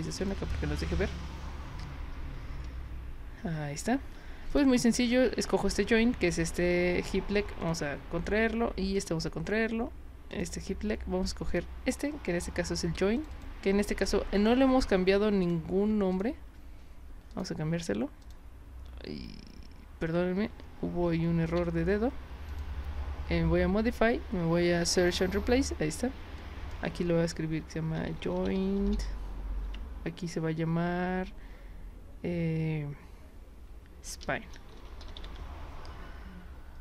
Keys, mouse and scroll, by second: 0.2 click, 4.5 click, 5.0 click, 7.6 click, 8.9 click, 10.3 click, 11.5 click, 13.2 click, 13.3 click, 14.0 click, 15.5 click, 16.1 shift+click, 17.3 click, 18.2 click, 21.4 ctrl+z, 22.5 click, 25.0 click, 26.4 click, 27.7-29.4 typing, 29.7 Tab, 33.9-35.8 typing.